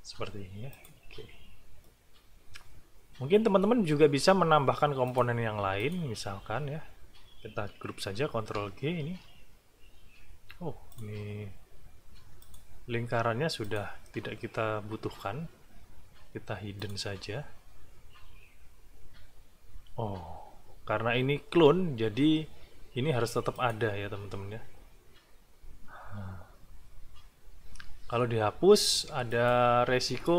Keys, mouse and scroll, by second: 0.7 click, 1.8-3.8 drag, 5.0 click, 5.8 shift+click, 8.3 ctrl+g, 10.9 click, 12.4 click, 13.6 click, 16.8 click, 23.5 click, 29.3 click.